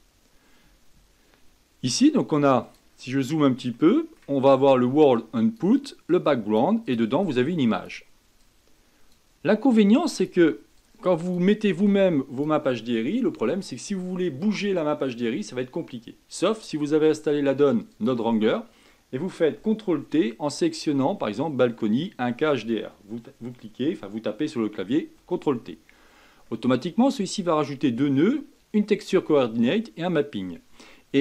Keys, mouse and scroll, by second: 0.0-7.0 drag, 7.3-8.5 drag, 9.7 click, 10.8 click, 11.8 click, 18.1 click, 25.3 ctrl+t.